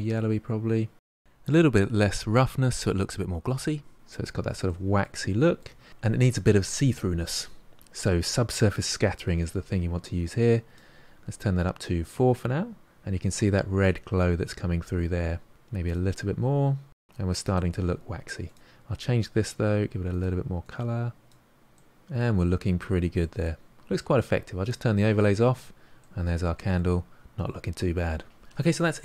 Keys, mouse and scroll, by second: 3.7-4.8 drag, 4.8-5.1 scroll up 1, 5.1-9.0 middle drag, 9.0-16.6 drag, 16.6 scroll down 2, 16.9-20.1 middle drag, 20.1 click, 21.8-22.8 middle drag, 22.8-23.2 scroll down 1, 23.2-24.6 middle drag, 24.6 click, 25.2-28.4 middle drag.